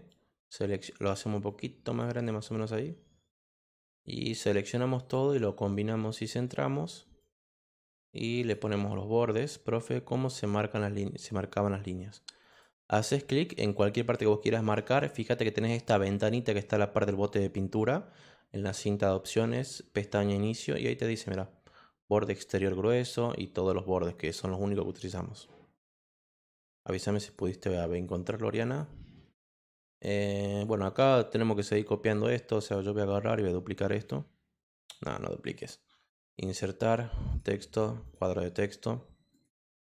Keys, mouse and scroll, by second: 0.0 click, 1.4 click, 3.9-5.1 drag, 7.2 click, 8.4 click, 12.5 click, 13.7 click, 16.1 click, 26.1 click, 27.2 click, 27.9 click, 28.6 click, 30.5 click, 31.1 click, 32.6 click, 35.4 click, 36.3 click, 37.3 click, 38.0 click, 39.3 click.